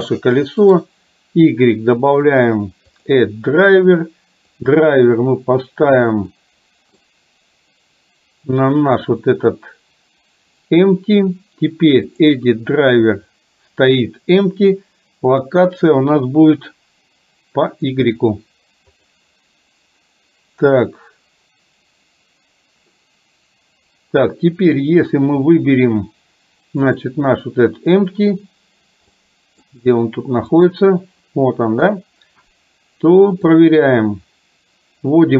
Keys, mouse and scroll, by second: 0.8-9.2 right drag, 10.7-22.9 right drag, 29.2-29.6 middle drag, 30.6 click, 31.8 KP_3, 33.7-35.3 drag.